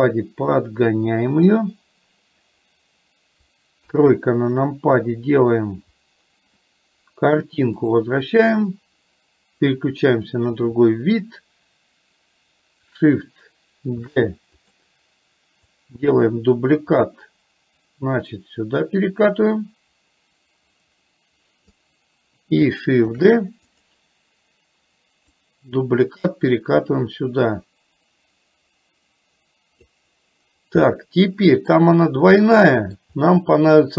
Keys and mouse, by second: 0.7 click, 4.0 KP_3, 7.9 click, 14.2 shift+d, 15.7-21.7 drag, 25.5-30.1 drag, 31.0 middle click, 32.5 middle click.